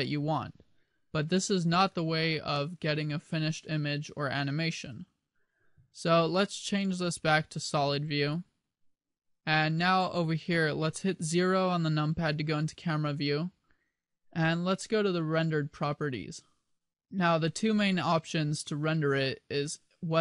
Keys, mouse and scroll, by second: 7.0 click, 8.4 click, 10.1 middle click, 12.5 KP_0, 16.1 click.